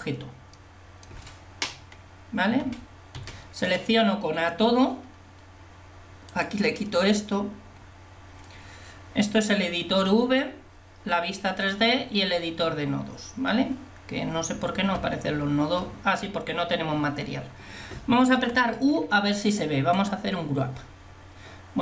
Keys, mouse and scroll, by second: 2.7 a, 3.2 a, 18.5 u.